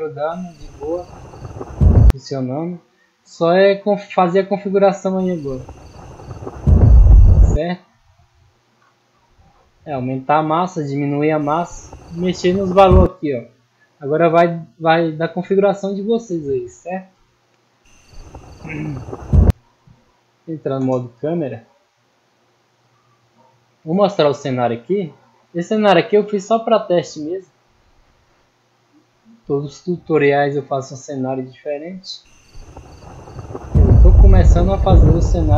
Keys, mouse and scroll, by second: 4.2-4.6 middle drag, 8.4-8.9 middle drag, 9.9 click, 14.0 middle click, 15.1 middle click, 17.1-17.4 middle drag, 19.8-20.8 scroll up 1, 23.7-24.8 drag, 25.1 middle click, 26.3 click, 28.1 click, 29.2 click, 29.6 click, 30.9 click.